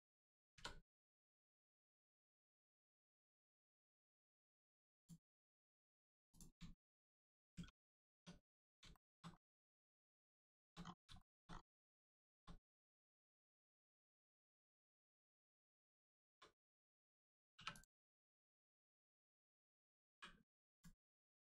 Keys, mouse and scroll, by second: 0.5 Return, 3.4 click, 5.3 scroll down 1, 6.3 click, 6.8 shift+middle click, 7.5 Tab, 8.4-8.7 scroll down 1, 8.9 shift+middle click, 9.3 scroll down 1, 10.4 shift+middle click, 11.4 scroll up 1, 12.0 shift+middle click, 12.6 click, 12.7 click, 13.2-13.7 scroll up 1, 13.8 click, 14.2 shift+middle click, 15.4 scroll down 1, 16.0 shift+middle click, 17.5 3, 17.7 click, 18.9-19.2 scroll down 1, 20.7 click, 21.2 scroll up 1.